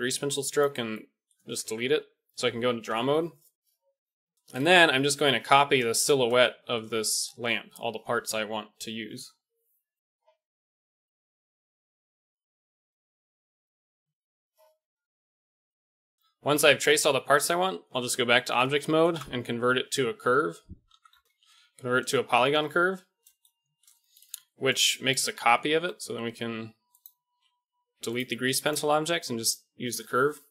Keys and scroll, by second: 0.1 x, 1.6 Tab, 9.4 ctrl+z, 17.9 Tab, 19.4 space, 21.6 Down, 21.7 Down, 25.7 g, 27.3 x.